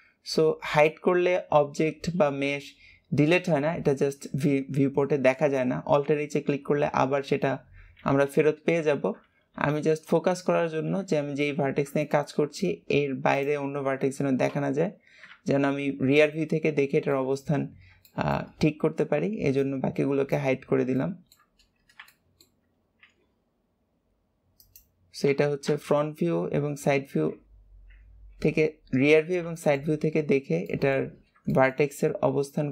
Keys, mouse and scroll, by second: 9.4 KP_1, 10.0 KP_3, 11.6-12.0 scroll down 3, 12.0 shift+middle click, 12.4-13.2 scroll up 2, 13.2 click, 14.4 ctrl+KP_3, 17.1 shift+middle click, 17.6-18.0 scroll up 1, 18.0 shift+middle click, 18.6-19.5 scroll up 1, 19.5 click, 20.9-22.9 shift+middle drag, 22.9 e, 29.1-29.4 scroll down 10, 29.4 shift+middle click, 29.8 scroll up 1, 30.6 shift+middle click, 31.1-31.4 scroll up 1, 31.4 shift+middle click, 31.9 scroll up 1.